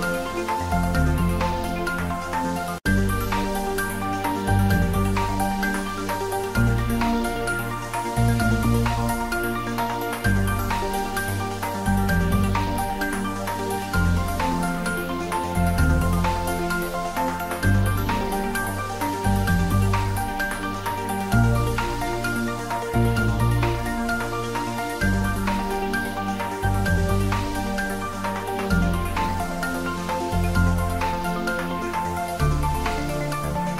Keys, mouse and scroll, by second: 0.5-5.4 typing, 1.4 click, 3.1 click, 7.5 click, 7.6-8.5 typing, 10.8 click, 12.6 click, 13.3-14.2 typing, 15.5 click, 18.1-19.5 middle drag, 19.5 Tab, 21.0 click, 22.4 ctrl+middle click, 22.9 shift+a, 23.5 click, 23.7 w, 24.7 e, 25.3-28.2 drag, 28.2 middle click, 28.6 click, 29.1 g, 29.4 click, 30.8 middle click, 32.8 click, 33.6 x.